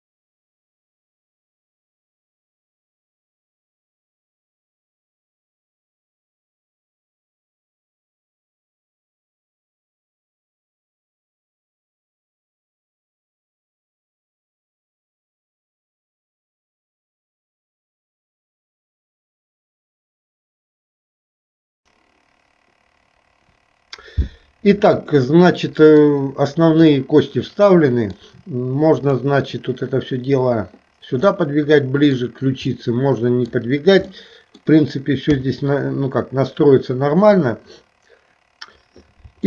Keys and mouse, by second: 0.6 alt+shift+p, 1.4 click, 1.6 alt+p, 1.8 click, 2.1 shift+middle click, 2.4 click, 2.7 ctrl+p, 3.0 shift+middle click, 3.4 e, 4.3 alt+p, 4.6 shift+click, 5.0 ctrl+p, 5.4 shift+middle click, 5.7 e, 6.1 click, 6.3 alt+p, 6.6 g, 7.5 g, 8.4 click, 8.4 KP_3, 8.9 click, 9.5 click, 11.2 g, 12.0 click, 12.0 e, 12.1 e, 12.6 click, 13.1 alt+p, 13.5 shift+click, 13.7 ctrl+p, 14.2 middle click, 14.6 click, 14.8 shift+click, 15.0 ctrl+p, 15.4 KP_1, 15.5 shift+middle click, 16.6 shift+middle click, 16.9 click, 17.2-20.8 typing, 20.0 click, 20.5 ctrl+p, 25.3 middle click, 27.0-28.3 middle drag, 29.1 click, 31.4 middle click, 32.8 middle click, 34.2 middle click, 35.5 KP_3.